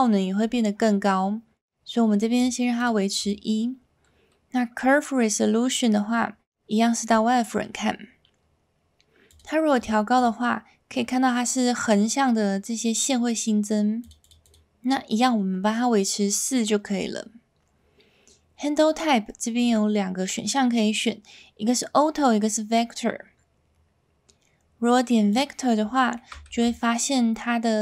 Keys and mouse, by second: 2.8 click, 3.2 click, 6.1 z, 9.3 click, 10.2 click, 14.0 click, 14.2 click, 14.4 click, 19.7-25.4 drag, 26.2 shift+middle drag, 26.5 z, 27.0-27.4 middle drag.